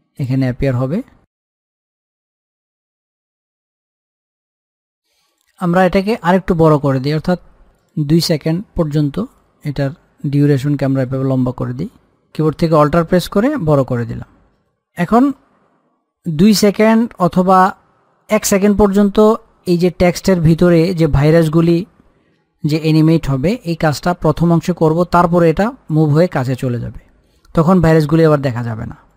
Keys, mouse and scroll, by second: 8.1-29.1 drag.